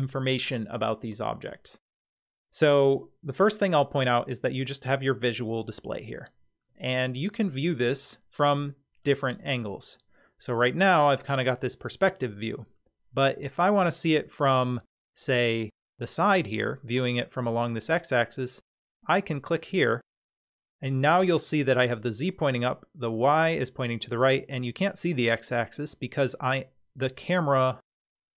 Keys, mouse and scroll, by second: 7.2-8.1 middle drag, 9.0-11.9 middle drag, 13.2-14.1 middle drag, 19.6 click.